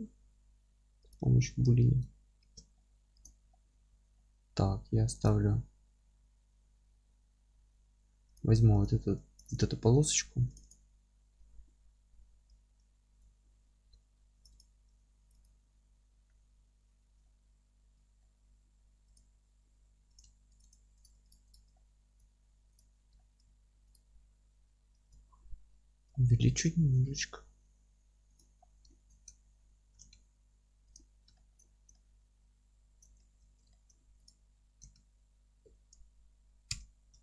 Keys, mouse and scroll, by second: 1.1 click, 1.6-3.3 middle drag, 2.4 shift+d, 3.3 click, 3.5-5.3 alt+middle drag, 3.9 Tab, 4.8 2, 5.3 click, 6.3-8.4 scroll up 1, 8.4 click, 8.5 3, 8.8 click, 9.5 click, 10.1 click, 10.6 click, 11.2-12.5 scroll down 1, 12.5 ctrl+i, 13.8 2, 14.5 click, 14.9 f, 15.4 click, 15.7 f, 16.3-19.1 middle drag, 18.6-19.1 scroll up 1, 19.1 click, 20.0 3, 20.1 click, 20.6 click, 21.5 click, 21.7-22.8 alt+middle drag, 22.8 click, 23.2 alt+middle click, 23.9 ctrl+click, 24.9 ctrl+i, 25.7-28.4 alt+middle drag, 26.8 alt+s, 28.4 click, 28.6 scroll down 1, 28.9-30.9 alt+middle drag, 29.2 Tab, 29.8 g, 30.9 click, 31.1-32.0 scroll up 4, 31.3-34.3 alt+middle drag, 33.4 Tab, 34.3 click, 34.8 g, 35.7 Escape, 36.7 o.